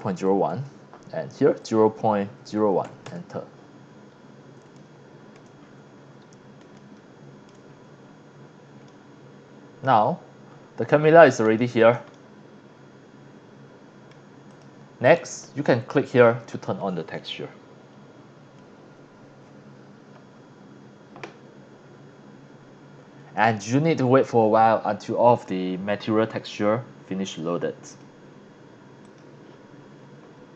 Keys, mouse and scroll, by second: 0.0 KP_0, 0.3 KP_1, 0.5 KP_Enter, 1.6 click, 2.2 KP_0, 2.4 KP_Decimal, 2.9 KP_1, 3.0 KP_Enter, 3.9 scroll up 1, 4.3 scroll down 1, 4.7-5.3 shift+middle drag, 5.6-6.1 scroll up 5, 6.7-7.4 shift+middle drag, 7.7-8.5 scroll up 3, 8.9-9.8 middle drag, 10.0-10.6 scroll up 2, 10.8 scroll down 1, 11.2 scroll up 1, 11.6-11.9 shift+middle drag, 12.1 scroll up 1, 12.1-14.1 middle drag, 14.5 click, 15.0 click, 16.1 click, 20.3 scroll up 1, 21.3 scroll down 1, 26.3 scroll up 1, 27.8 click, 29.0 click.